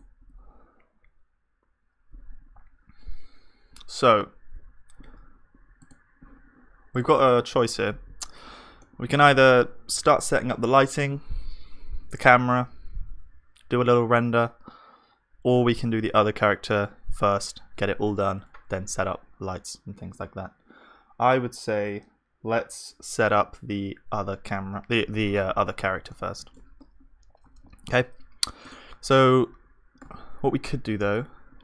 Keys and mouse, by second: 2.7-7.7 middle drag, 7.7 ctrl+s, 7.7-8.9 drag, 8.9-11.0 middle drag, 26.1-29.3 middle drag, 29.3-30.6 drag, 30.6-31.6 middle drag.